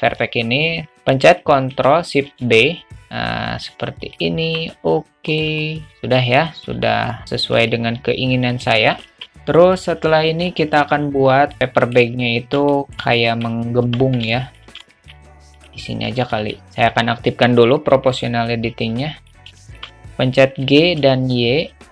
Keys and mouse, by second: 2.5 ctrl+shift+b, 4.5 Tab, 5.3 click, 5.7 alt+middle drag, 5.9 alt+z, 6.1-6.7 alt+middle drag, 7.1 alt+z, 7.1-7.6 alt+middle drag, 8.5 click, 9.3 alt+middle click, 10.5 alt+middle drag, 11.6 alt+middle click, 12.7 shift+middle drag, 13.1-13.5 alt+middle drag, 13.8 Tab, 14.3 shift+middle click, 14.8 alt+middle click, 15.6 click, 16.4 alt+middle click, 17.9 click, 19.0 alt+click, 19.6 shift+click, 20.6 g.